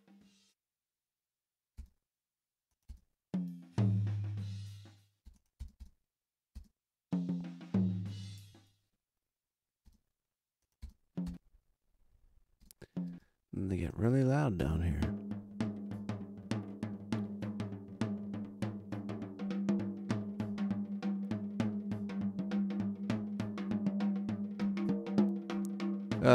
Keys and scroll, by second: 1.7 space, 2.8 space, 5.2 space, 9.8 space, 14.5 space.